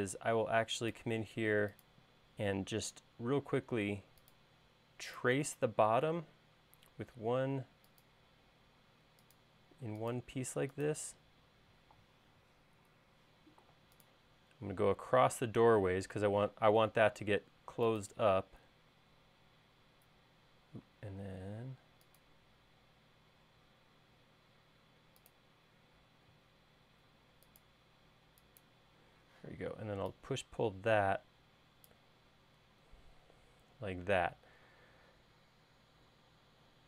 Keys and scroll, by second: 21.1 l, 24.4 l, 28.7 e, 30.1 p.